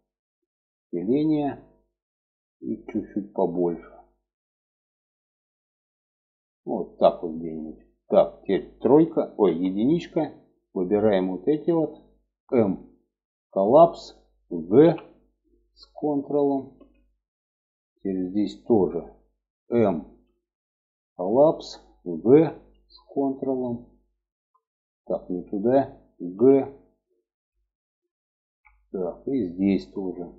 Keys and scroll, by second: 8.8 1, 14.2 g, 19.6 m, 21.7 g, 25.7 g.